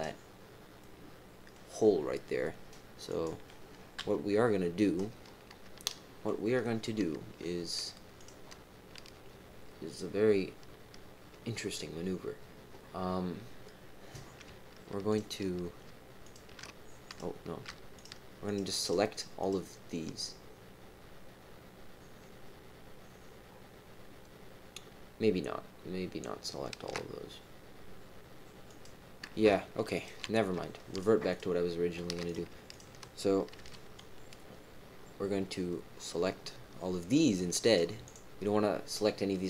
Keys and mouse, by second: 0.8 middle click, 3.0 click, 4.0 KP_1, 5.8 shift+middle click, 6.2 shift+click, 8.1 click, 15.1 shift+click, 16.2 alt+shift+click, 17.0 click, 17.9 shift+click, 18.8 shift+click, 19.3 shift+click, 28.6 click, 29.9 shift+click, 30.9 shift+click, 31.3 shift+click, 32.2 click, 32.7 shift+click, 33.5 c.